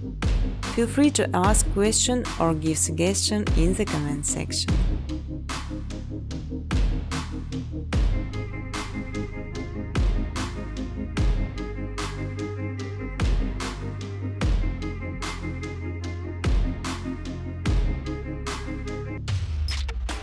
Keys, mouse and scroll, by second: 0.3 space, 1.0 middle click, 1.2 space, 1.8-2.2 scroll, 1.8 space, 4.3 space, 4.7 space, 7.1 scroll, 8.2 space, 8.5 space, 11.7 space, 11.9 space, 15.7 space, 16.0 space, 17.5 space.